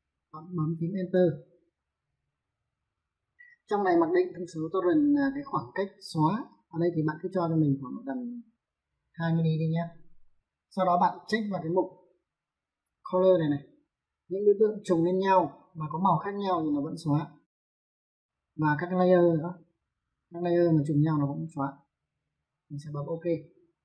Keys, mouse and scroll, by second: 1.0 space, 7.4 click, 8.5 click, 9.0 2, 10.3 click, 13.5 click, 18.4 click, 23.7 click.